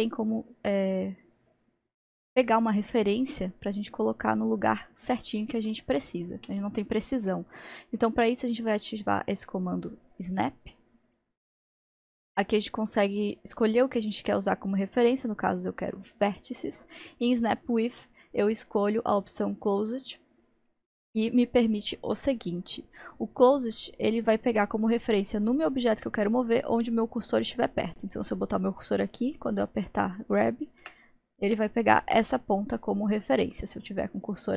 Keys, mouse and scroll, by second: 10.3 click, 11.1 click, 14.2 click, 30.8 g.